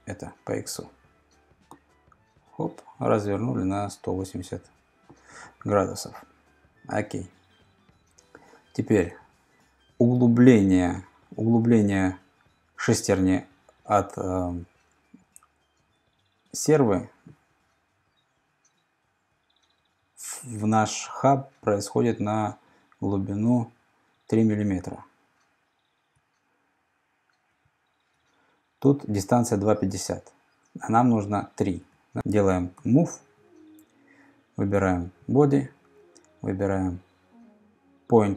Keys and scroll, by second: 9.0 super+Tab, 14.5 super+Tab, 29.7 super+Tab, 31.8 super+Tab, 32.8 m.